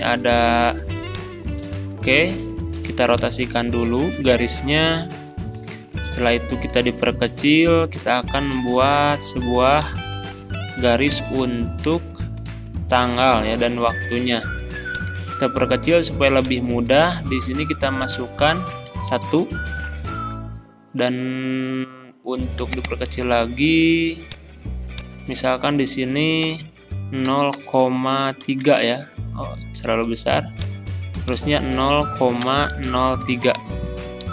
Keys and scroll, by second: 18.9 1, 19.1 Return, 26.4 Delete, 27.3 0, 28.4 3, 28.6 Return, 32.5 BackSpace, 32.9 0, 33.6 Return.